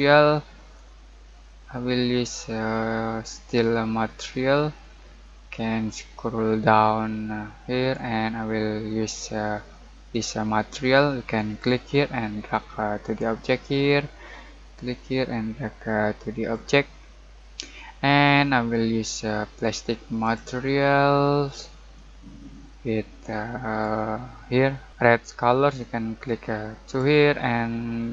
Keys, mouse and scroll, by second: 20.2-28.1 drag, 20.2 typing, 22.2 typing.